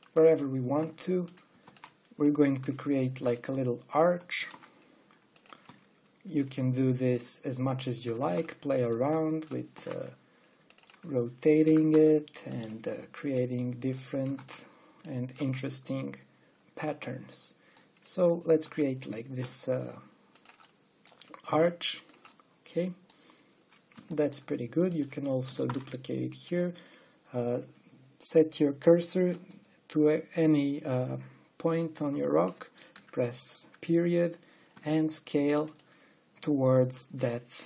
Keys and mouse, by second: 1.3 r, 2.3 shift+d, 3.3 g, 5.0 r, 6.4 s, 8.9 shift+d, 10.4 r, 12.4 r, 15.0 shift+d, 16.4 middle click, 16.4 click, 16.5 middle click, 16.6 click, 16.8 middle click, 16.8 click, 16.9 middle click, 19.3 r, 22.3 click, 23.1 click, 23.2 click, 26.3 shift+d, 33.6 ., 35.4 s.